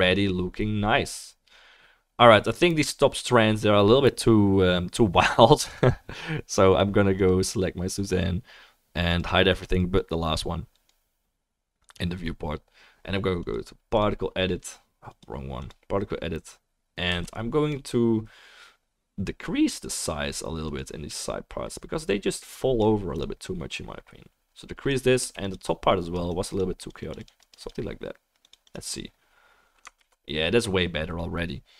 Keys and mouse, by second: 7.2 click, 7.2 middle click, 8.1-10.0 right drag, 10.0-13.5 right drag, 17.1 f, 17.8-19.9 right drag, 20.8 right click, 23.5-25.5 drag, 23.5-31.7 middle drag, 23.5-31.7 right drag, 25.2 f, 25.6-31.7 drag, 30.4 ctrl+s.